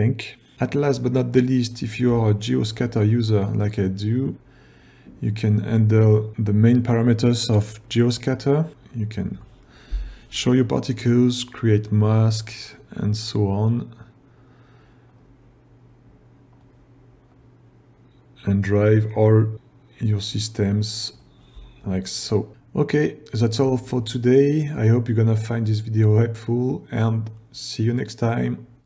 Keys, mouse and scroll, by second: 0.1 click, 0.6 click, 2.6 ctrl+scroll down 1, 17.4-21.3 drag.